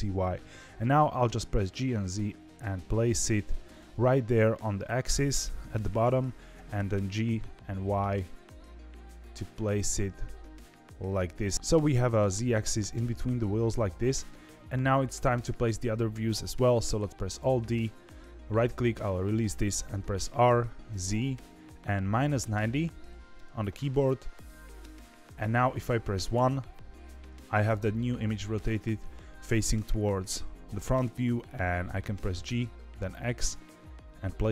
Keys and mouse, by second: 1.7 g, 6.5 g, 17.3 alt+d, 20.2 r, 26.3 KP_1, 32.1 g.